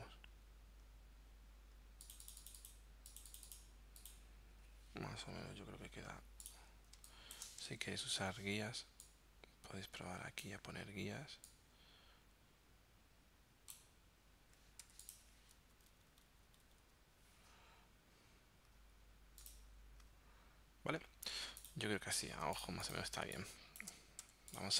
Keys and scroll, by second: 5.6 shift+Down, 6.2 z, 7.0 space, 7.9 super+r, 14.9 v, 15.8 Up, 22.3 z, 23.2 space, 24.3 v.